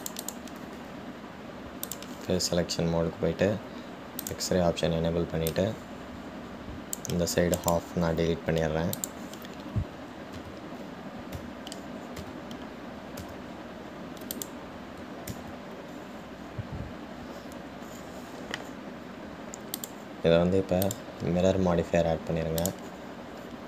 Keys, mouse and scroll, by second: 3.1 click, 5.5-6.8 drag, 8.9-11.6 right drag, 11.6 Tab, 12.6 Tab, 13.6 a, 16.6 ctrl+z, 21.0 click.